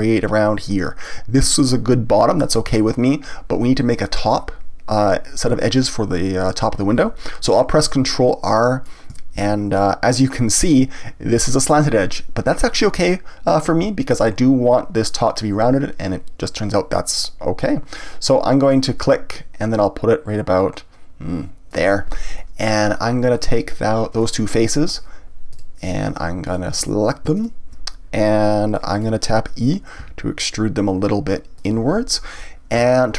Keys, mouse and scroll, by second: 8.0-9.4 middle drag, 9.4 ctrl+r, 21.7 click, 22.4-24.2 middle drag, 24.2 click, 25.5 click, 26.4 shift+click, 28.4-30.0 middle drag, 30.0 e, 31.6 click, 32.3-32.8 scroll up 1, 32.8 shift+middle click.